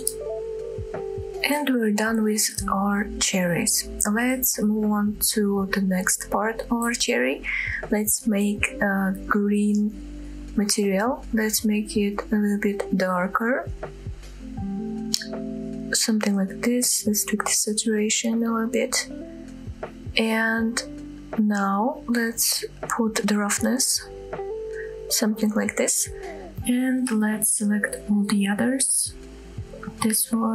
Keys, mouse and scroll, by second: 0.2 ctrl+l, 1.3-1.6 drag, 2.4 scroll down 1, 3.5-4.2 middle drag, 4.7 shift+middle drag, 5.2 middle click, 5.7 shift+middle drag, 6.4 drag, 6.9 click, 8.3 click, 9.3 click, 23.6-24.9 drag, 25.6-26.0 middle drag, 26.6 click, 27.6 shift+middle click, 28.0 shift+middle drag, 28.4-28.8 shift+middle drag, 28.9-29.4 middle drag, 30.4 shift+click.